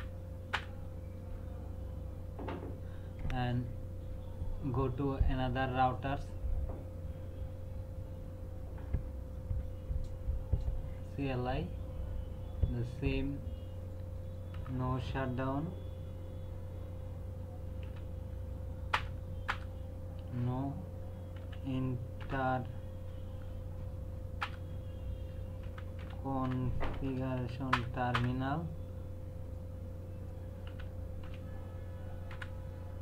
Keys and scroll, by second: 14.5 n, 17.8 o, 18.9 Return, 21.4-22.7 typing, 24.4 Return, 25.4-27.4 typing, 27.7 Return, 30.7-32.3 typing.